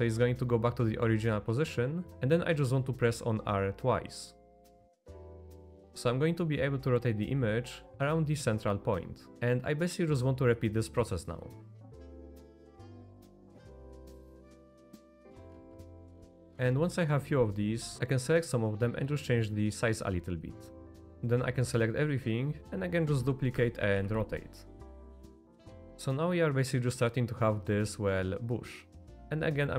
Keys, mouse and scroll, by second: 4.5 r, 9.3 r, 10.9 middle click, 11.3 click, 11.7 click, 11.8 middle click, 12.0 shift+d, 12.2 r, 13.0 middle click, 13.3 shift+d, 13.5 r, 14.1 middle click, 14.2 r, 14.7 middle click, 15.6 middle click, 15.9 middle click, 16.5 z, 16.8 middle click, 17.7 middle click, 18.2 s, 18.9 click, 19.3 s, 20.1 r, 20.7 middle click, 21.1 a, 23.1 shift+d, 23.9 r, 25.8 middle click, 25.9 Tab, 25.9-26.9 middle drag, 28.3-29.0 middle drag, 29.2 ctrl+z, 29.5 middle click.